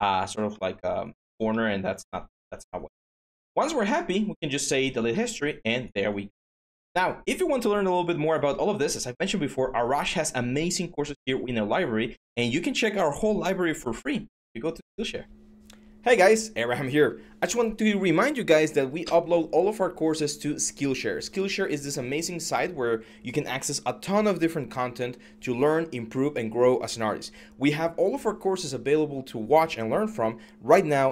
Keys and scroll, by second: 2.2 q.